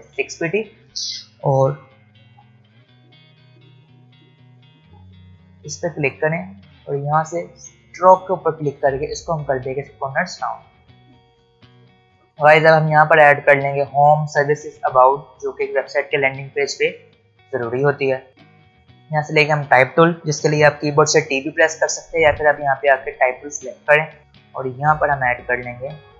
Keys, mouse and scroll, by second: 0.5 ctrl+alt+scroll down 1, 1.8 v, 2.5 click, 3.0-3.5 alt+scroll up 1, 4.4 click, 11.0-11.5 alt+scroll down 1, 18.3 click, 21.9 ctrl+alt+Num_Lock, 21.9 ctrl+alt+scroll up 1, 23.7 ctrl+Num_Lock, 23.7 ctrl+alt+scroll down 1, 26.0 click.